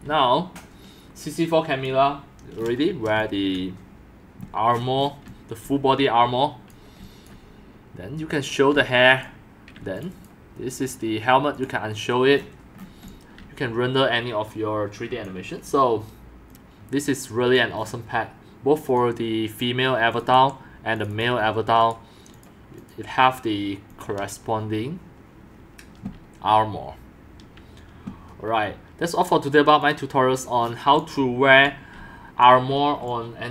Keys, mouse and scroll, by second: 0.1 c, 2.6-3.0 scroll up 2, 3.1 x, 3.2 click, 4.7 middle click, 5.2 x, 5.6 c, 6.9 c, 8.7 x, 12.0 middle click, 12.3 middle click, 13.0 x, 13.4 c, 16.5-17.5 drag, 18.9 click, 20.1 click, 20.3 BackSpace, 20.9 click, 21.1 click, 23.9 click, 29.8 click, 30.6 middle click, 30.6 scroll down 1, 30.9 click, 31.6 x, 31.9 c, 33.0 x.